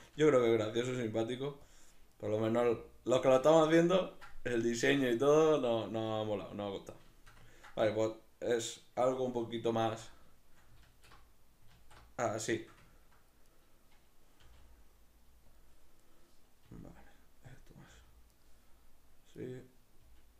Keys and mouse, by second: 0.2 g, 1.8 click, 2.2 right click, 2.6 g, 3.3 click, 3.6-13.6 ctrl+shift+middle drag, 9.7 alt+q, 10.8 alt+q, 13.6 right click, 14.4 g, 15.6 click, 16.0 right click, 16.7 r, 17.6 click, 17.9 g, 18.4 right click, 19.4 right click, 20.0 g.